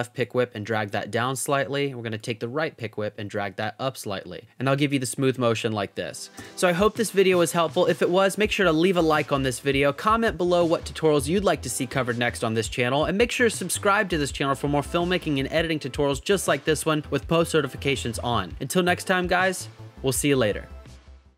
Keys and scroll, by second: 4.8 space, 6.4 space.